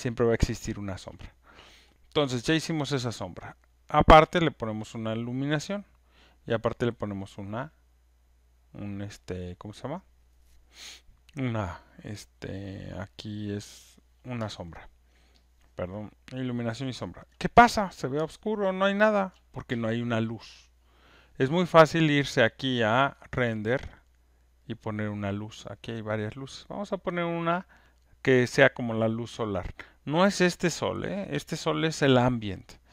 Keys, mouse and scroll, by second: 0.6 alt+right click, 0.7 alt+click, 4.7 click, 6.5 click, 15.1-16.3 alt+right drag, 16.8 alt+click, 17.2 alt+right click, 17.5 click, 19.3 alt+right click, 23.3 click, 24.2-28.5 drag.